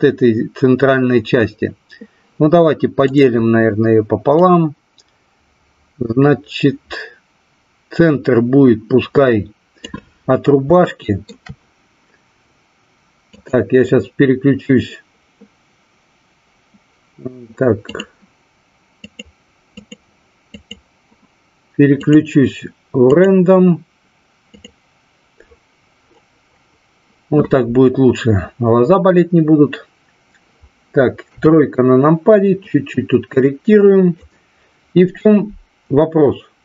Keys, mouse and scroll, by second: 3.0 click, 4.3-9.8 drag, 10.8 shift+middle click, 13.2-17.9 drag, 19.0 click, 20.6 click, 22.0-25.4 drag, 31.3 KP_3, 32.7-34.2 drag.